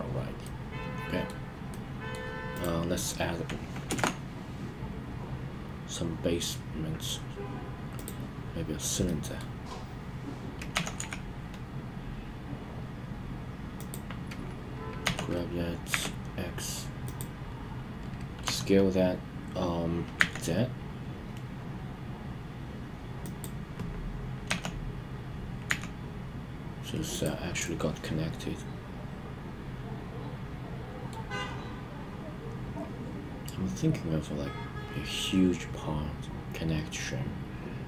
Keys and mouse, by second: 0.4-1.3 middle drag, 1.6-2.1 middle drag, 2.5 click, 9.0-9.4 middle drag, 10.7 g, 10.9 z, 13.7 click, 15.0 g, 15.8 x, 17.0 click, 18.4 s, 20.1 z, 23.2 click, 24.4 g, 25.6 z, 27.1 click, 27.6-31.1 middle drag.